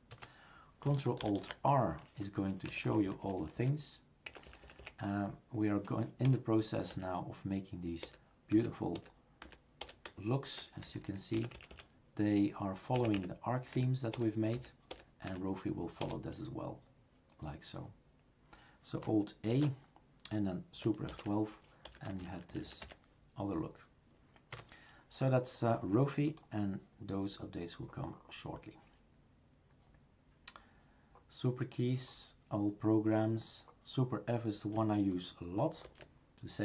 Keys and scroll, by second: 0.1 Escape, 2.7 Down, 6.3 Return, 8.0 Return, 10.9 Down, 13.0 Up, 13.2 Up, 19.5 alt+a, 21.1 super+F12, 24.5 Escape, 35.8 super+f.